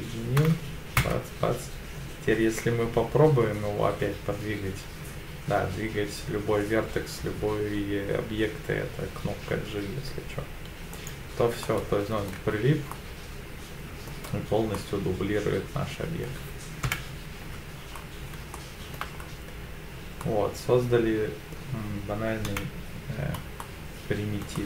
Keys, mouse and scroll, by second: 0.4 Tab, 1.0 Tab, 2.1 g, 10.9 right click, 11.6 middle click, 12.4 Tab, 12.9-14.1 middle drag, 14.3-14.7 scroll down 2, 14.7-16.2 middle drag, 16.8 KP_7, 17.8 Tab, 17.9-18.3 scroll up 2, 18.5 shift+middle click, 19.2 scroll up 1, 20.2-21.5 middle drag, 22.5 KP_7, 23.6 shift+middle click, 24.5-24.6 shift+middle drag.